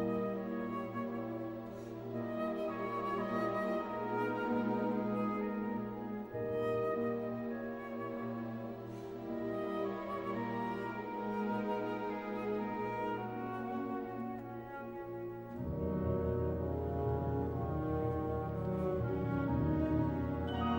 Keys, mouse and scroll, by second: 0.0-0.5 typing, 0.5-3.9 middle drag, 3.0 click, 7.6 click, 9.7 click, 11.7 click, 14.0-15.5 middle drag, 15.5 click, 19.0-20.6 middle drag, 20.4 v.